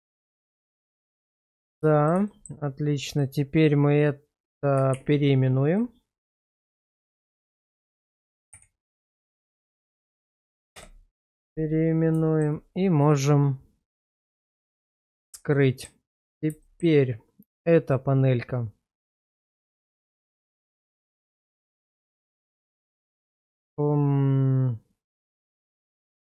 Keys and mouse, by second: 0.6 /, 1.8 middle drag, 2.3 shift+middle click, 4.9 shift+r, 6.7 BackSpace, 6.8 BackSpace, 7.1 BackSpace, 7.3 BackSpace, 12.3 shift+middle drag, 14.4 click, 15.2 shift+middle drag, 15.5-15.8 middle drag, 16.6 shift+middle drag, 17.9-26.2 middle drag.